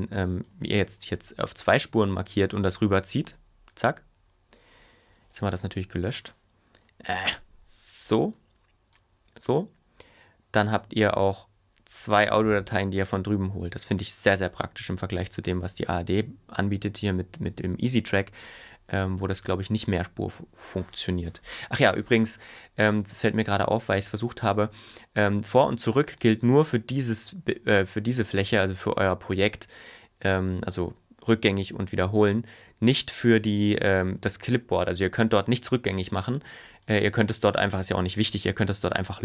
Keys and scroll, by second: 5.3 super+y, 10.1 ⟲, 13.5 super+y, 18.6 super+y, 21.3 BackSpace, 24.4 ⟲.